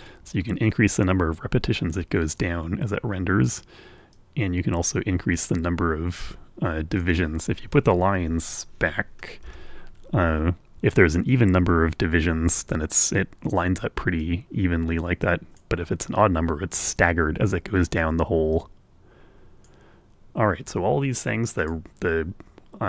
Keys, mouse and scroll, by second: 4.3-7.3 drag, 9.3 l, 14.4-16.0 drag, 18.6-20.0 drag, 21.8 click.